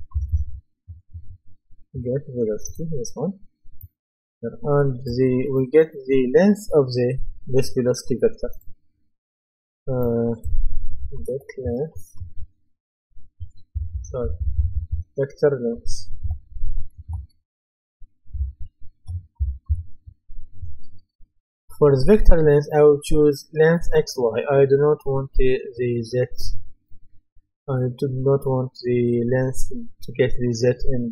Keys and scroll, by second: 11.0-13.7 typing, 15.7-20.2 typing.